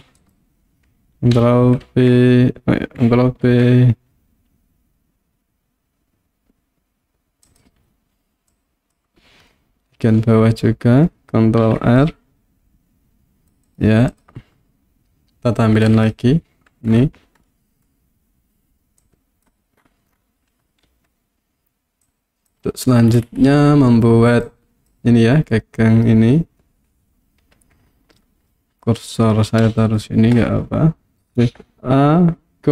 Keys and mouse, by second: 0.2 right click, 1.4 ctrl+g, 3.5 ctrl+b, 7.5 click, 8.7 click, 9.7 middle click, 11.6 ctrl+r, 13.7 click, 15.9 click, 17.5 middle click, 19.0 click, 20.9 KP_1, 22.1 click, 24.5 click, 29.8 shift+right click, 31.1 Tab, 31.4 shift+a.